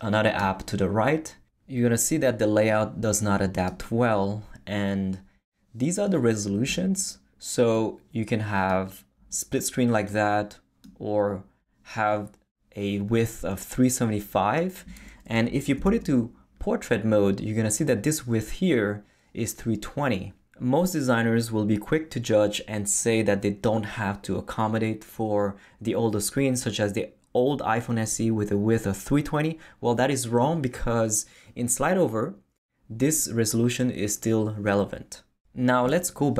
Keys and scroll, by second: 15.8 super+Left.